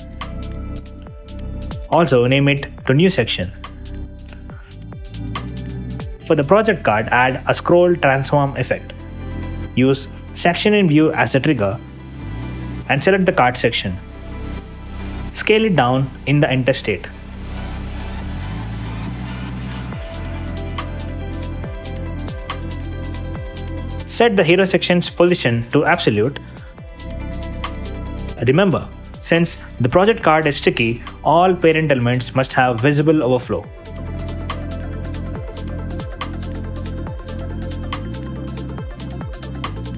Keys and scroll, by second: 1.3 space, 2.1 space, 2.3 Return, 3.8 Return, 4.5 w, 4.7 space, 5.5 n, 5.6 Return, 15.9-17.7 typing.